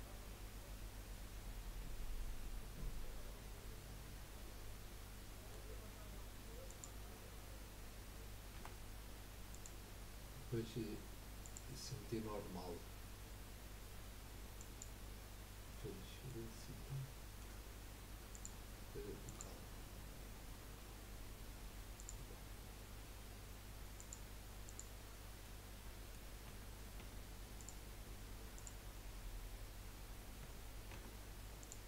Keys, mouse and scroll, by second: 0.0-2.2 middle drag, 6.7 click, 8.6 r, 11.4-14.5 drag, 16.5-18.3 middle drag, 18.3-21.4 drag, 25.4-26.4 middle drag, 26.4 Tab, 27.0 Tab, 27.5 click, 28.5 click, 30.4 Tab, 30.9 Tab, 31.6 click.